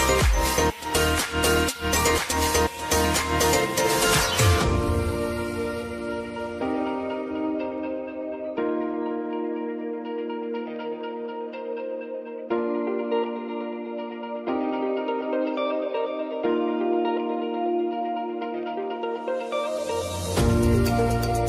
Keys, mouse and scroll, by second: 0.1 click, 1.0 ctrl+z, 1.7-3.6 drag, 3.6 ctrl+d, 4.3-7.4 drag, 8.0 p, 9.6-21.4 drag.